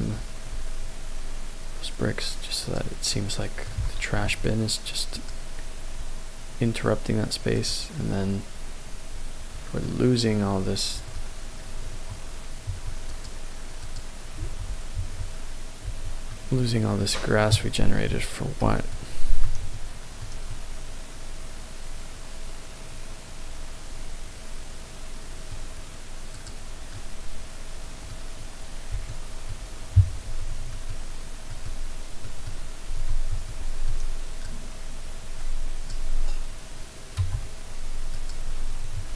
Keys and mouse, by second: 0.2 y, 2.7 click, 3.1-4.1 middle drag, 4.1 KP_0, 5.2 click, 9.8-11.2 middle drag, 11.9 Tab, 12.7 Tab, 13.1 middle click, 13.8 middle click, 14.4 Tab, 15.0 Tab, 15.9 Tab, 16.5 middle click, 18.8 alt+middle click, 19.7 shift+middle click, 20.4-25.5 middle drag, 26.4 click, 27.1 middle click, 29.1 shift+middle click, 30.7-32.6 alt+middle drag, 33.5 shift+click, 34.4-36.0 drag, 37.1 x, 39.0 Tab.